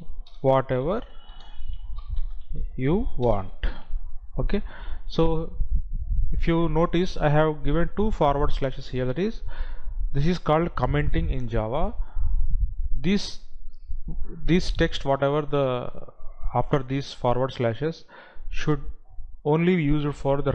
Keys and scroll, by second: 0.7 space, 1.7 space, 2.6 space, 3.7 space.